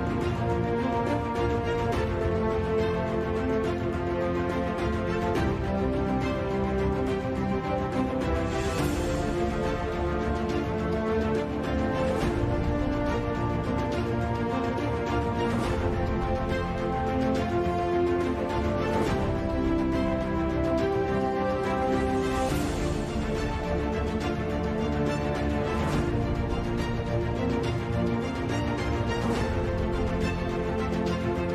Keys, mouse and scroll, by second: 1.1-4.8 typing, 4.6 click, 5.4 ctrl+s, 6.4 z, 6.6 z, 7.2 g, 9.6 ctrl+b, 10.4 ctrl+shift+b, 11.3 ctrl+shift+b, 11.8 ctrl+shift+b, 12.6 ctrl+shift+b, 14.8 Tab, 15.1 Tab, 15.6 ctrl+r, 16.8 KP_7, 17.0 KP_5, 18.1 k, 24.5 KP_5, 25.8 middle click, 26.2 middle click, 27.0 Tab, 27.5 Tab, 28.3 w, 28.9 ctrl+z, 29.3 ctrl+r, 29.8 KP_7, 29.8 KP_5, 30.1 KP_Divide, 30.6 KP_Divide, 30.9 KP_7.